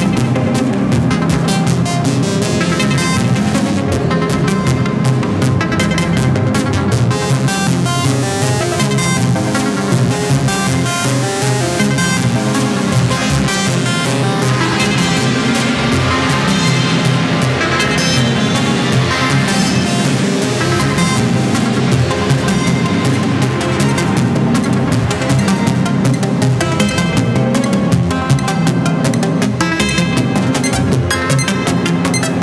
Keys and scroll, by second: 5.0 Up, 8.5 Up, 16.7 ctrl+c, 27.4 Delete, 28.5 ctrl+c, 31.0 Delete, 31.8 ctrl+c.